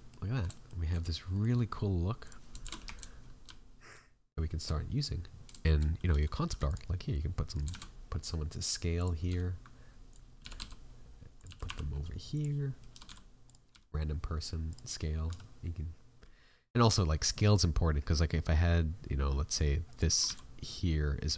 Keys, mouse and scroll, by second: 0.2 scroll up 5, 0.5 shift+middle click, 0.9 scroll down 1, 1.3 middle click, 2.2 click, 2.6 shift+f, 7.5 right click, 7.6 shift+a, 9.2 s, 10.4 g.